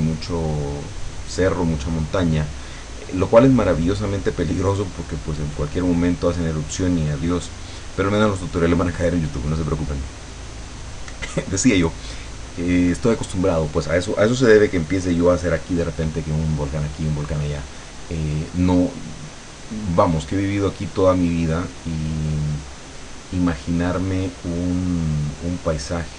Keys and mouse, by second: 17.6-18.8 drag, 18.9 click, 19.7 click, 20.9 click, 23.0 click, 24.6 click.